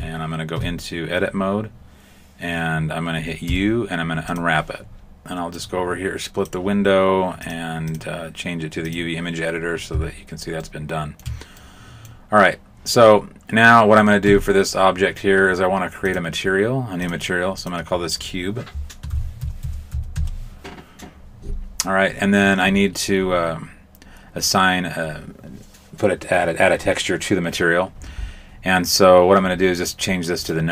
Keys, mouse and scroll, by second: 0.6 Tab, 3.4 u, 5.5 click, 7.4 click, 7.8 click, 10.6 shift+middle click, 11.5 middle click, 14.2 Tab, 16.0 click, 17.0 click, 17.8 click, 30.4 click.